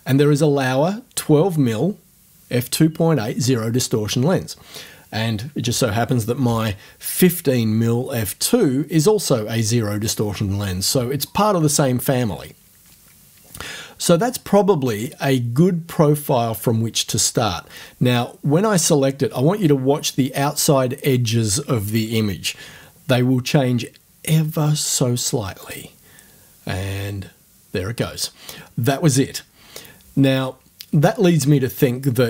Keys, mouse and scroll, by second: 25.6 click.